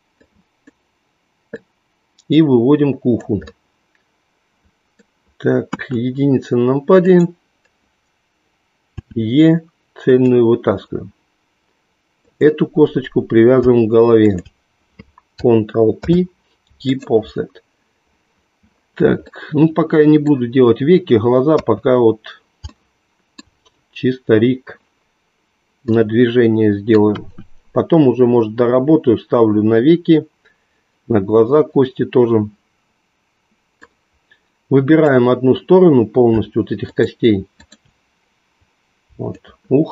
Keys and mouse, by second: 1.5-3.3 drag, 3.5-5.2 middle drag, 5.7 KP_1, 7.1 click, 8.9 e, 12.2-13.7 drag, 14.2 shift+click, 15.8 ctrl+p, 19.5 middle click, 21.5 KP_3, 22.7 shift+middle click, 27.1 KP_1, 33.9-35.1 drag, 36.8 shift+click, 39.3-39.9 shift+drag.